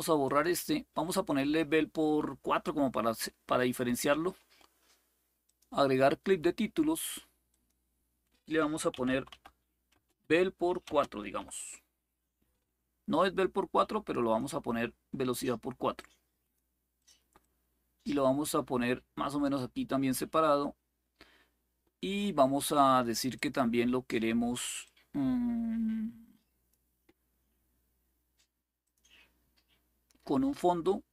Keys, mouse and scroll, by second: 0.0 click, 5.2 click, 7.2 click, 8.7-11.1 typing, 13.9 click, 15.7 click, 16.7 click, 17.2-19.2 drag, 23.1 click, 24.6-26.5 drag, 28.6 click.